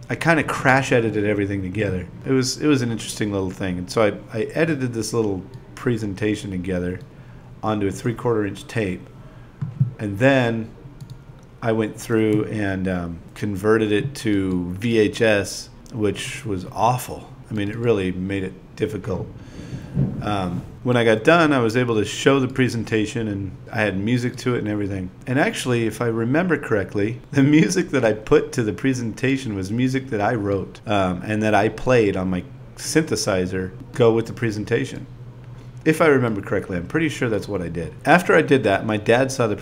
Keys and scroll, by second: 7.7 4, 8.0 shift+e, 10.2-11.2 typing, 13.7 8, 16.6 BackSpace, 17.1 a, 18.2 i, 19.7 ., 21.7-24.7 typing, 26.1 ,, 26.5 shift+d, 28.4 BackSpace, 31.0 v, 31.7 BackSpace, 32.1 BackSpace, 33.6 v, 34.2 super+v, 35.3 BackSpace, 37.7-39.6 typing.